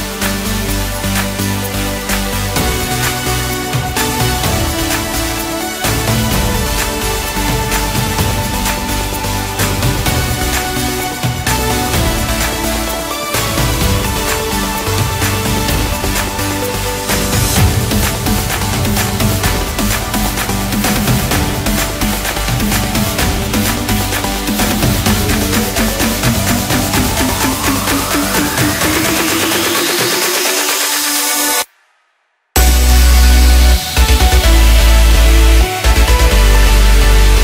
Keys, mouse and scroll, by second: 1.1-3.8 drag, 3.8-4.4 middle drag, 4.4-4.9 scroll up 1, 4.9 right click, 5.8-6.1 scroll down 1, 6.1-7.7 middle drag, 7.7 click, 8.8 click, 9.5-10.9 drag, 11.4 scroll down 3, 11.7-12.7 middle drag, 12.7 KP_1, 13.3-14.3 scroll down 1, 14.3 shift+d, 18.3-19.1 middle drag, 19.1 scroll up 1, 19.4 Tab, 19.8-20.8 middle drag, 20.8 3, 21.3 click, 22.0 KP_1, 23.0 g, 26.1 Tab, 26.4 scroll down 2, 26.7-27.5 middle drag, 27.5 scroll up 1, 27.8-28.1 scroll down 1, 28.1-28.8 middle drag, 28.8 scroll up 1, 29.1 Tab, 29.7 click, 30.9 shift+s, 33.1-33.5 scroll down 1, 33.5 Tab, 34.6-37.4 drag.